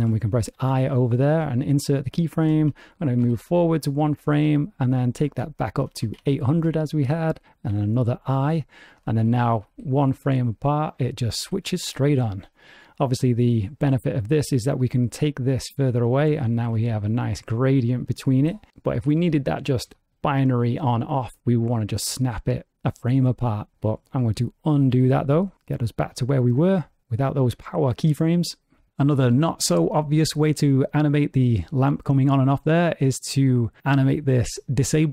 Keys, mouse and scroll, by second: 0.6 i, 3.2 Right, 5.0 click, 6.0 KP_0, 7.7 i, 9.6 Left, 10.0 Right, 10.6 Left, 11.0 Right, 11.6 Left, 11.9 Right, 13.2 click, 14.4 click, 16.7 Right, 16.9-18.3 Right, 18.4 Right, 19.4 ctrl+z, 19.9 ctrl+z, 20.4 ctrl+z, 24.4 ctrl+z, 24.8 ctrl+z, 25.1-25.5 ctrl+z.